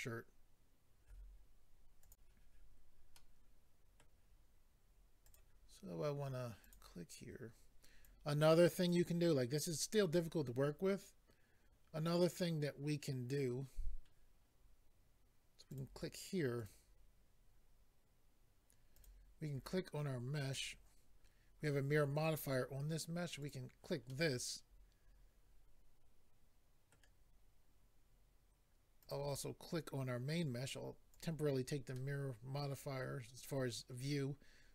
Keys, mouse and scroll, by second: 2.0 click, 3.2 middle click, 5.2 click, 6.6 click, 8.0 click, 15.7 click, 16.6 click, 19.0 click, 20.5 click, 23.4 click, 24.1 middle click, 29.0 click, 31.1 click, 31.9 middle click.